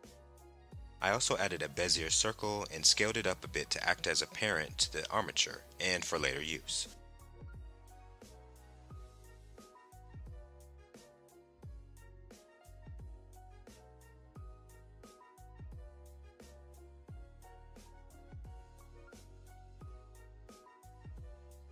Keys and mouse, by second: 1.3 shift+c, 1.3 shift+a, 5.9 s, 6.4 KP_7, 7.8 KP_Enter, 11.4 shift+click, 13.2 ctrl+p, 15.0 click, 16.2 g, 17.3 right click.